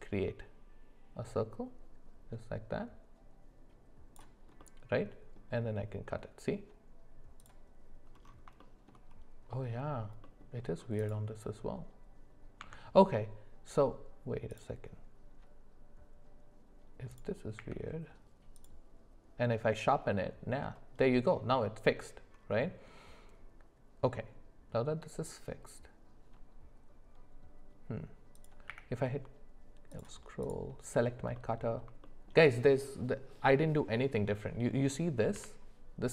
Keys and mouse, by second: 4.6-7.5 middle drag, 8.6-8.9 shift+middle drag, 10.2 middle click, 12.6 Tab, 17.1 click, 17.5 q, 28.3 click, 28.7 q, 31.3 middle click, 32.0 shift+middle drag, 35.3 g.